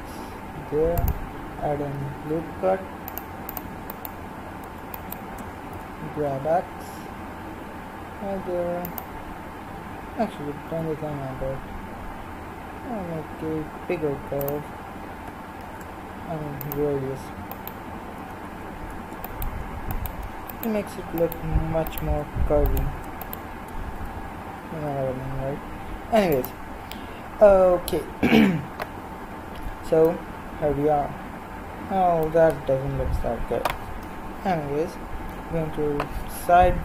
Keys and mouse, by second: 2.0 ctrl+r, 3.9-6.6 drag, 5.7 g, 10.7 g, 14.1 g, 15.6 ctrl+r, 19.3-26.3 right drag, 24.0 g, 35.2 KP_3.